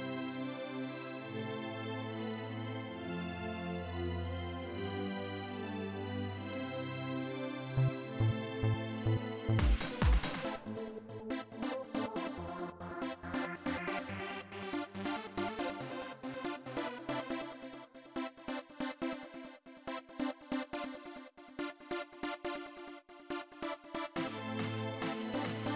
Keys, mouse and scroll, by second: 1.2 click, 3.5 click, 6.5-7.6 drag, 9.3 click, 13.4 click, 14.7 click, 20.6 click, 23.1 click, 24.9-25.7 drag.